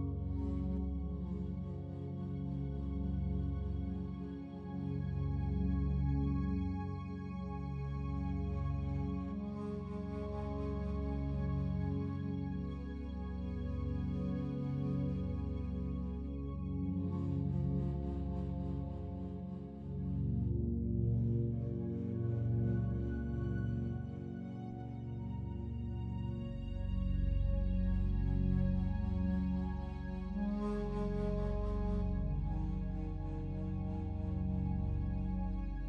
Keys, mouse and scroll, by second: 4.8 click, 7.1 e, 10.4 click, 11.3 a, 12.0 a, 15.9 Tab, 17.6 click, 20.4-23.4 alt+drag, 24.3-28.9 alt+drag, 29.9-31.9 alt+drag, 31.9 a, 32.1 a, 33.3 alt+click, 35.1 Tab, 35.5 right click.